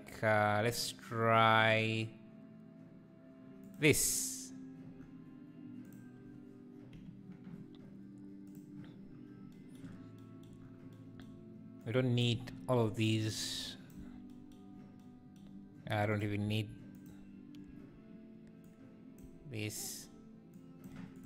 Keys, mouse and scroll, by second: 6.1-8.5 drag, 12.4 x, 14.0 x, 17.6 Left, 18.7 click, 19.2 x.